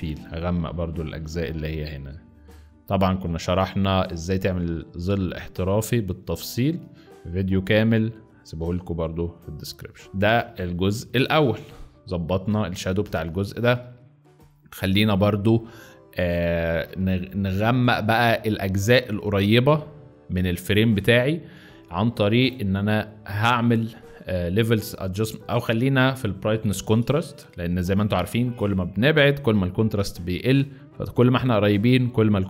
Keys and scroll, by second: 8.6 z, 10.3 space, 10.9 z, 13.1 space, 13.7 z, 16.8 space.